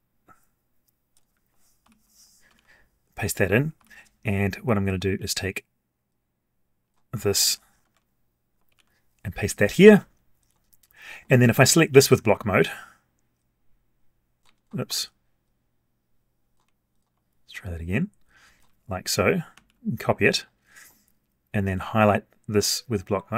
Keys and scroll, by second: 1.8 ctrl+n, 2.5 ctrl+v, 3.7 ctrl+n, 7.4 ctrl+c, 7.8 alt+Tab, 8.7 ctrl+v, 19.5 ctrl+c.